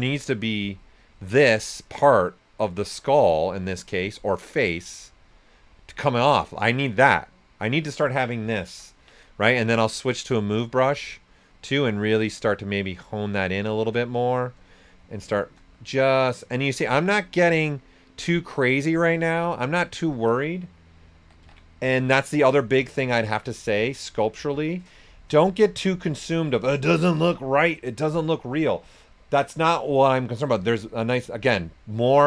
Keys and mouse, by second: 3.9 right click, 4.3-6.1 drag, 6.1 right click, 8.4 typing, 9.6 click, 12.3 shift+click, 15.0 shift+click, 19.4 right click, 20.9-22.3 typing, 21.9 click, 22.7 alt+right click, 23.3 click, 24.0 s, 24.1 click, 27.8 right click, 30.2 typing.